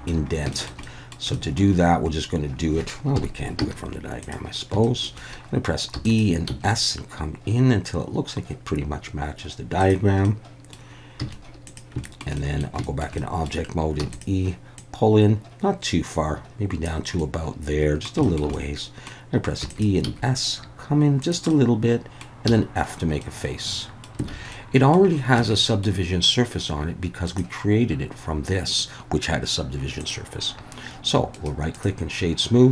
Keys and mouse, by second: 0.5 shift+middle click, 0.9 middle click, 1.4 shift+middle click, 3.2 KP_1, 3.6 z, 4.8 shift+middle click, 6.0 e, 6.0 click, 6.5 s, 9.8 click, 10.3 middle click, 11.2 z, 12.0 shift+middle click, 12.5 middle click, 12.9 shift+middle click, 13.3 middle click, 14.0 e, 14.1 click, 14.8-16.9 drag, 17.3 middle click, 18.6 middle click, 19.6 e, 19.7 click, 20.0 s, 21.2 click, 21.6 middle click, 22.5 f, 23.2 middle click, 24.3 alt+a, 24.5 middle click, 25.4 Tab, 25.6 middle click, 27.2 click, 30.0 click, 31.4 right click.